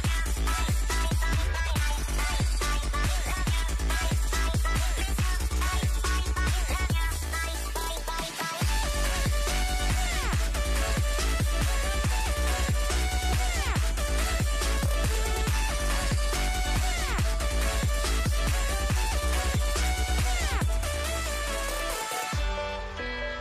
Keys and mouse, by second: 1.1-5.1 middle drag, 5.1 a, 5.7 alt+h, 6.3 a, 6.5 a, 6.6 w, 7.1 a, 8.3-9.7 typing, 9.8 Tab, 11.8 alt+h, 12.1 a, 14.5 ctrl+j, 14.8-17.5 typing, 17.3 Tab, 19.3-21.3 typing, 20.0 Tab, 20.8 alt+h, 22.2-23.4 middle drag.